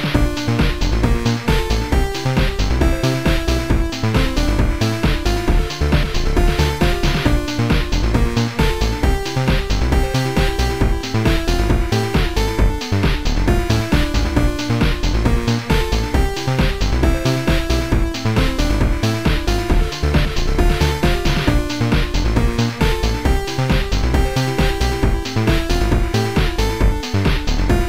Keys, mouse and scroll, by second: 0.0 click, 0.1 click, 1.8 Delete, 2.5 click, 2.9 Delete, 4.0 click, 4.4 Delete, 5.4 Delete, 6.7 click, 6.8 Delete, 6.8 click, 7.5 click, 8.0 Delete, 8.0 click, 9.6 click, 11.0 click, 11.5 Delete, 11.5 click, 12.1 click, 13.5 Delete, 13.5 click, 15.9 Delete, 15.9 click, 17.9 Delete, 17.9 click, 19.3 click, 19.5 click, 20.0 click, 25.9 click.